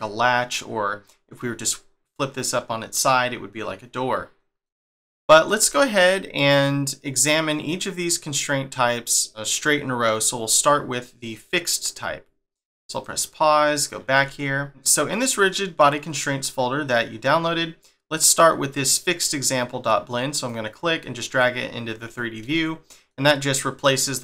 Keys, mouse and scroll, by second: 2.9 middle click, 6.5 click, 12.9 click, 13.7 click, 14.8 scroll up 1, 17.9 scroll up 3, 20.5 click.